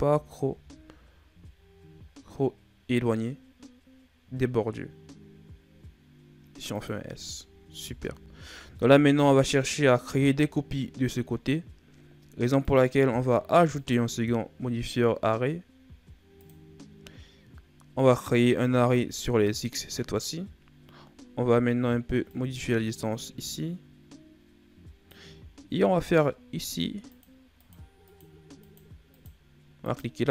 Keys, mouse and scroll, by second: 0.4 s, 7.0-7.3 scroll down 2, 7.3-7.8 ctrl+scroll up 4, 7.8 Tab, 8.4 a, 12.5-16.6 drag, 20.2-22.2 scroll up 2, 22.2 shift+click, 27.0-30.3 drag.